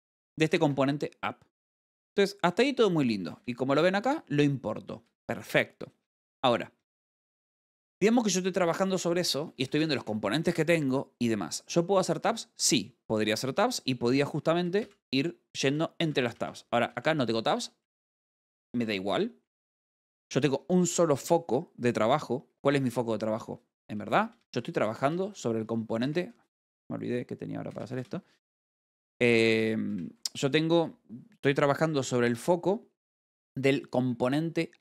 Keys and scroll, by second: 0.0 v, 3.8 g, 4.5 v, 7.2 k, 7.5 j, 10.0 l, 15.3 shift+6, 24.5 g, 24.9 v, 26.5 Escape, 28.2 i.